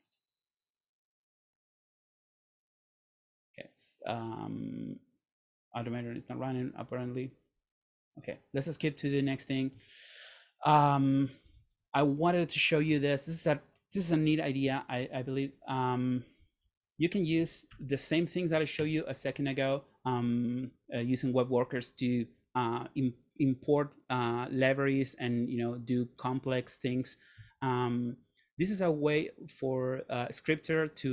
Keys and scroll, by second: 13.0 Delete, 17.8 super+/, 18.6 Down, 18.9 Return.